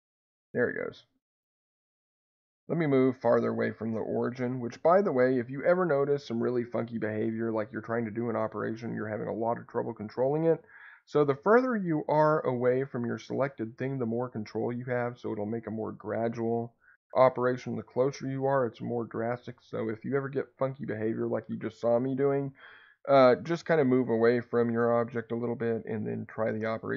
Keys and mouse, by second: 3.0 Escape.